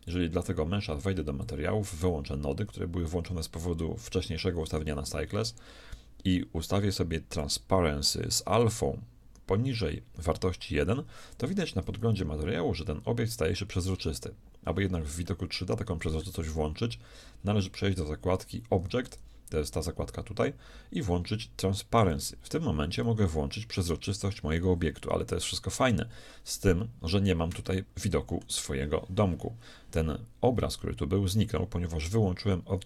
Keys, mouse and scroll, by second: 0.1-3.5 drag, 7.4-10.6 drag, 15.4-17.2 middle drag, 17.7-19.6 drag, 22.0-24.0 drag, 23.0-24.9 middle drag, 27.7-29.3 middle drag.